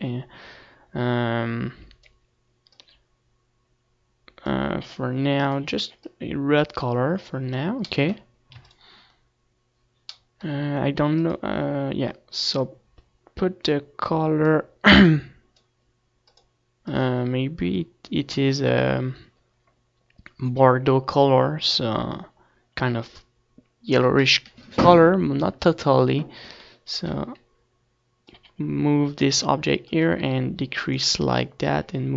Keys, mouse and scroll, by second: 7.5-8.5 drag, 9.2-14.0 middle drag, 10.0 ctrl+s, 14.0 click, 18.5-19.6 drag.